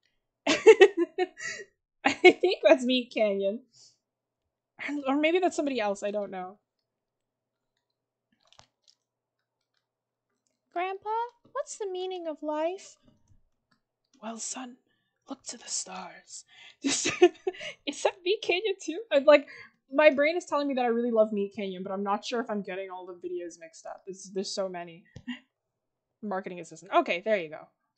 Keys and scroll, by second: 1.6 ctrl+z.